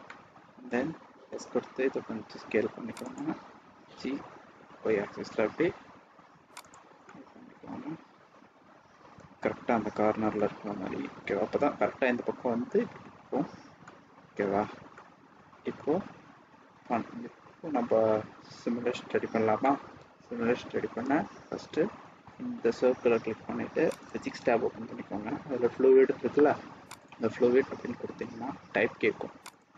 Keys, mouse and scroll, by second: 0.0 middle click, 1.3 s, 3.7 g, 7.0 middle click, 10.3 middle click, 13.8 middle click, 14.8 middle click, 15.8 scroll up 2, 16.0 scroll down 1, 17.5-17.9 scroll up 1, 17.9-18.5 scroll down 1, 19.6 middle click, 23.8 click, 26.8 click.